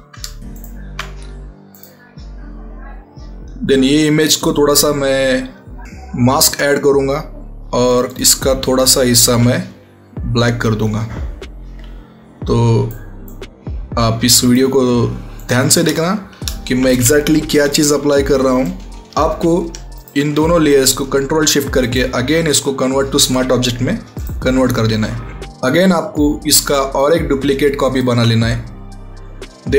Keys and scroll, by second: 17.4 ctrl+alt+t.